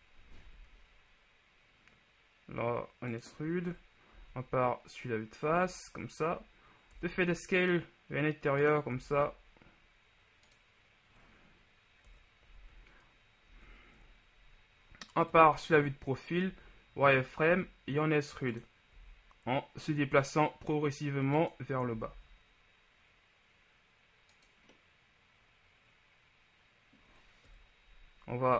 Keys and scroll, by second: 3.9 KP_1, 4.2 z, 5.6 z, 7.2 s, 7.2 z, 9.0 s, 12.3 KP_3, 12.6 z, 14.0 KP_1, 15.4 KP_3, 16.6 z, 22.1 s, 22.2 z, 27.6 KP_3.